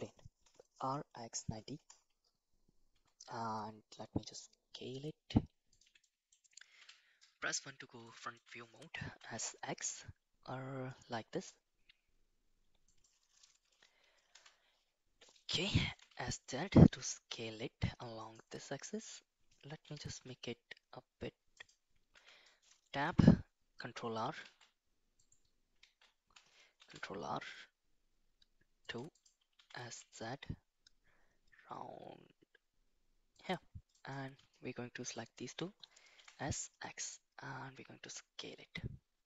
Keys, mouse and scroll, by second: 0.4 r, 2.9 s, 3.4 s, 6.1 middle click, 6.7 KP_1, 8.0 shift+middle click, 9.0 s, 15.8 s, 19.8 s, 22.1 Tab, 23.0 ctrl+r, 25.8 shift+z, 26.7 ctrl+r, 29.5 s, 33.9 click, 35.1 shift+click, 36.1 s.